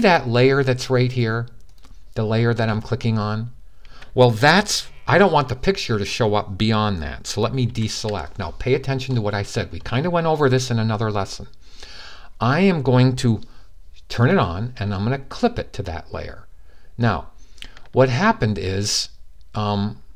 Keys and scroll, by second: 7.4 super+d.